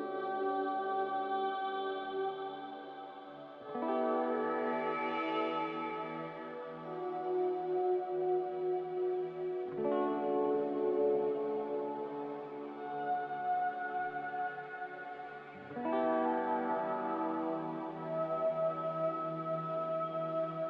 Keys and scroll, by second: 0.6 F9, 18.3 b, 19.9 Delete.